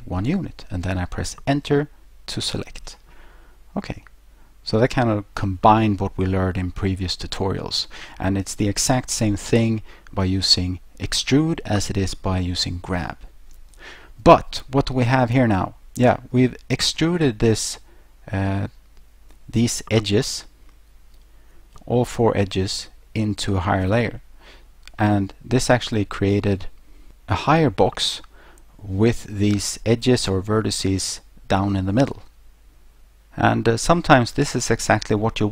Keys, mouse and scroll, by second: 2.4 Return, 4.1 middle click, 11.7 middle click, 25.1 middle click, 34.6 middle click.